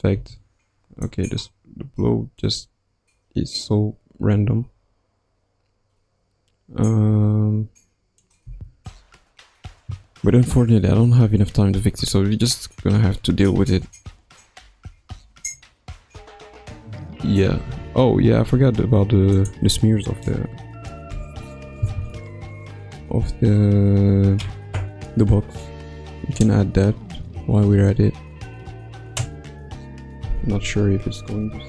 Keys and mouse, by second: 0.1 space, 1.0-8.2 drag, 8.4 space, 17.8 ctrl+s, 18.5 space, 19.3 click.